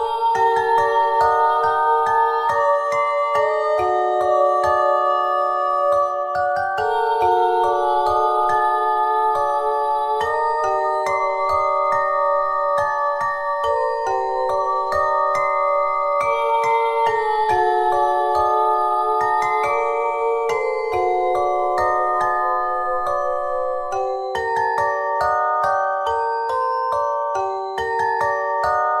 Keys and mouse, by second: 3.4 f, 4.2 e, 7.6 s, 8.7 e, 15.0 e, 15.9 s, 18.7 ctrl+Tab, 25.3-29.0 drag.